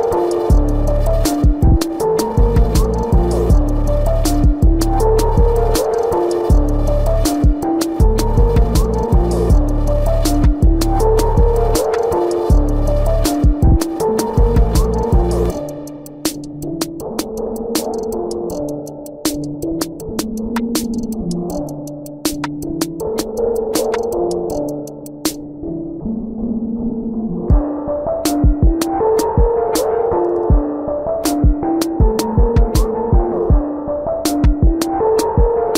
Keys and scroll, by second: 3.3 ctrl+alt+z, 10.6 space.